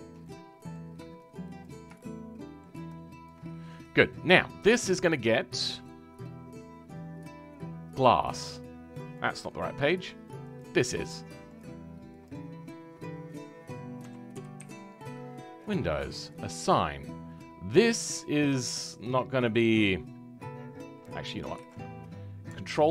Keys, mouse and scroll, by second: 0.2-1.6 middle drag, 1.6 shift+click, 1.9-3.2 shift+middle drag, 3.2 shift+click, 3.4-3.8 scroll down 4, 3.8-11.5 middle drag, 11.5-18.6 drag, 22.6 ctrl+i.